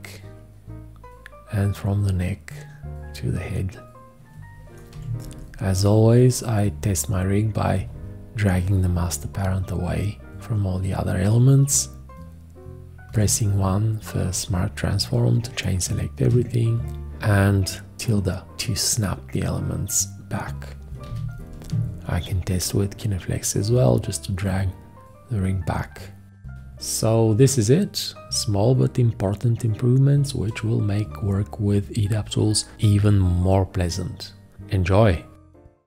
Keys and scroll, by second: 4.9 v, 13.1 1, 16.2 `, 21.0 g.